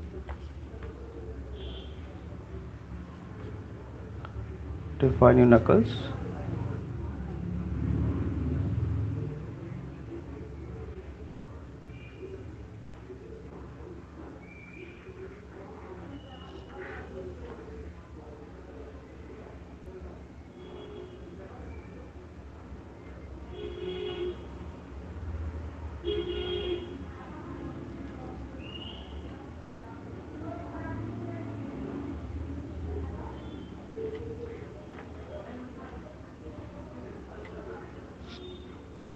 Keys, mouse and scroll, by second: 0.3 alt+click, 1.0-1.6 [, 1.8 [, 3.1 click, 3.5 ], 3.7 ], 6.0 click, 7.7 click, 7.9 click, 8.4 click, 11.4 click, 11.6 click, 11.8 click, 12.3 click, 12.9 click, 13.3 click, 13.7 click, 14.3 click, 16.1 click, 16.3 click, 17.7-22.5 alt+click, 18.3 click, 18.5 click, 18.7 click, 19.3 click, 19.6 click, 19.8 click, 20.6 click, 21.0 click, 22.1 click, 22.9 click, 23.7 click, 24.6 click, 25.8 click, 26.2 click, 26.8 click, 27.2 click, 27.4 click, 27.6 click, 28.9 click, 29.3 click, 29.8 shift+click, 29.9 shift+click, 30.1 shift+click, 30.3 shift+click, 30.5 shift+click, 31.1 shift+click, 31.6 shift+click, 31.8 shift+click, 32.3 shift+click, 32.7 shift+click, 33.5 shift+click, 33.9 shift+click, 34.1 shift+click, 35.0 alt+click, 35.8 click, 36.3 shift+click, 36.4 shift+click, 37.0 shift+click.